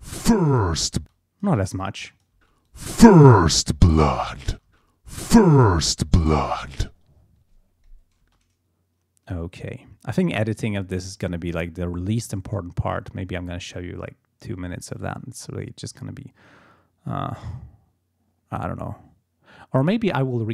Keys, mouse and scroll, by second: 1.0 space, 1.1 click, 1.8 click, 2.4 space, 2.7 click, 3.7 click, 4.2 click, 4.5 space, 6.6 click, 6.9-7.4 ctrl+scroll down 2, 8.2 space.